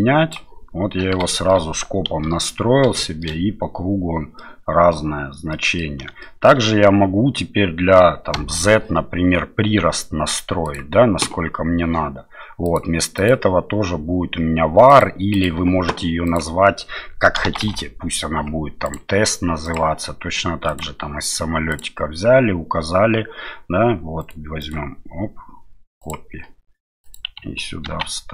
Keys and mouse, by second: 1.3 shift+middle click, 2.1 KP_7, 3.0 middle click, 4.4 middle click, 5.5 middle click, 6.2 shift+middle click, 8.4 space, 10.6 click, 12.6-15.1 drag, 15.3 click, 16.2-18.9 drag, 19.7 click, 21.7-24.5 drag, 24.8-26.2 right drag, 27.1-28.3 drag.